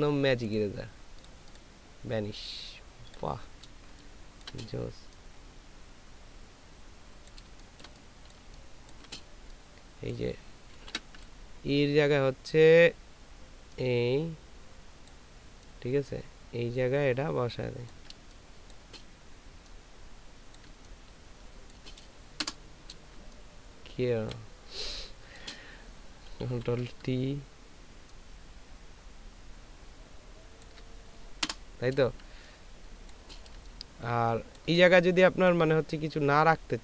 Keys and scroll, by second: 4.1 ctrl+space, 7.7 ctrl+space, 8.4 ctrl+space, 10.8 ctrl+t, 18.5 ctrl+space, 22.4 ctrl+Return, 24.7 ctrl+space, 25.8 ctrl+space, 26.5 t, 31.4 Return, 32.2 space, 33.5 space.